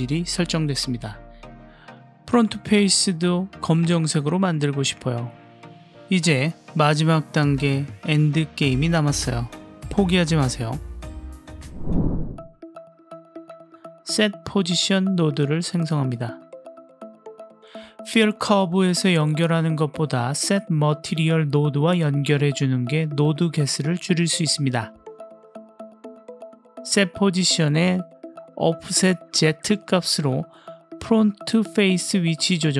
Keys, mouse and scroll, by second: 0.1-2.3 middle drag, 6.7-7.6 middle drag, 8.3 click, 9.1 middle click, 10.2 click, 11.5 click, 13.0 shift+a, 17.8 click, 18.7-22.0 drag, 22.4 click, 23.1-24.2 drag, 24.9-25.6 drag, 27.8 click, 28.6 middle click, 29.8-30.8 drag, 31.4 middle click.